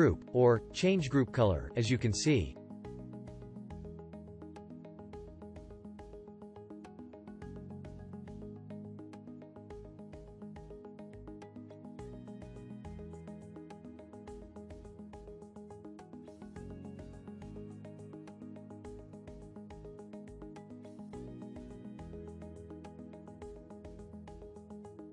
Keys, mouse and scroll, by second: 21.6-25.1 shift+drag.